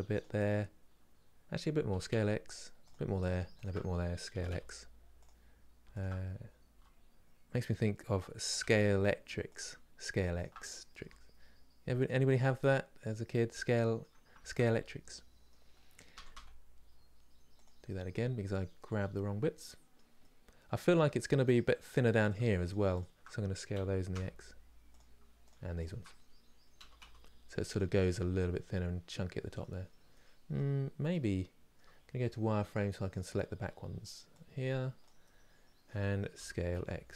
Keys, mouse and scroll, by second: 3.2 alt+click, 4.0 s, 5.6 alt+click, 6.4 s, 10.0 alt+Left, 10.7 s, 12.0-14.0 middle drag, 14.0 ctrl+z, 14.5-15.8 middle drag, 15.8 s, 17.5-21.2 middle drag, 21.2 Left, 22.3 shift+Left, 23.4 s, 26.5 s, 27.6-32.7 middle drag, 32.7 click, 34.7 click, 34.9-36.1 middle drag, 36.1 s.